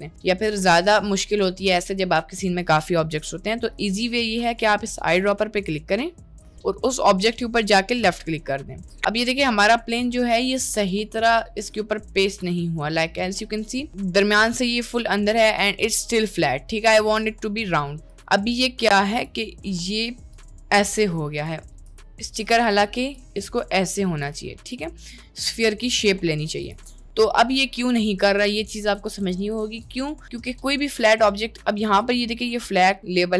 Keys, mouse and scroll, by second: 0.0 click, 1.0-3.7 drag, 8.6 middle click, 11.2 click, 11.9-12.3 shift+middle drag, 12.7-13.4 middle drag, 13.7 middle click, 15.5 middle click, 16.0 middle click, 16.5-17.2 middle drag, 20.3-21.6 drag, 22.3 ctrl+click, 23.2-24.4 drag, 24.7 ctrl+click, 26.6 click, 26.9 middle click, 27.9 Tab, 29.0 Tab, 29.2 Tab, 29.5 Tab, 29.8 Tab.